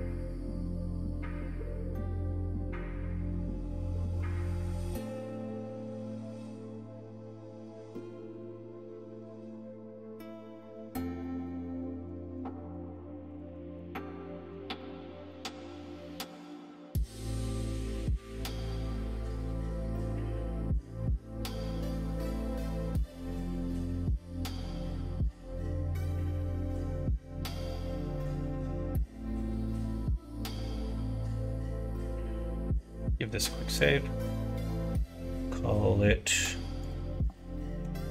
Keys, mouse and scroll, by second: 0.3 middle click, 1.6 shift+click, 2.0 shift+middle click, 2.7 middle click, 3.3 middle click, 4.0 ctrl+b, 8.3 ctrl+r, 10.7 middle click, 11.3 click, 11.6 middle click, 12.5 middle click, 13.3 shift+click, 13.5 middle click, 14.8 shift+click, 15.3 middle click, 16.0 middle click, 16.9 ctrl+b, 19.1-20.2 middle drag, 20.7 middle click, 22.8 middle click, 23.7 middle click, 24.0 Tab, 24.3 middle click, 24.9 middle click, 25.3 shift+middle click, 25.7 middle click, 26.0 middle click, 26.4 middle click, 27.3 middle click, 29.8 middle click, 30.5 middle click, 31.1 middle click, 31.6 middle click, 32.4 middle click, 32.8 ctrl+s.